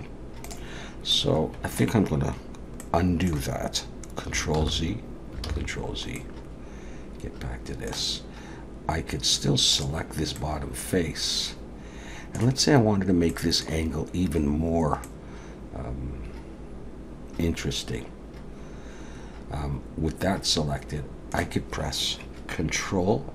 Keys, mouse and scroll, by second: 1.1 middle click, 2.8 middle click, 4.6 ctrl+z, 5.5 ctrl+z, 6.2 middle click, 9.7 click, 10.4 middle click, 13.3 middle click, 15.0 middle click.